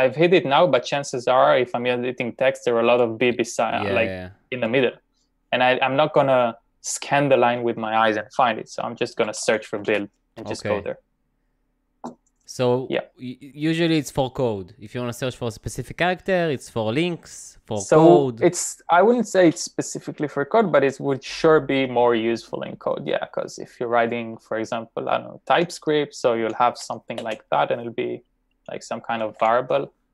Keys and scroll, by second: 4.5 typing, 8.4-10.0 typing, 25.6-27.5 typing, 29.1-29.9 typing.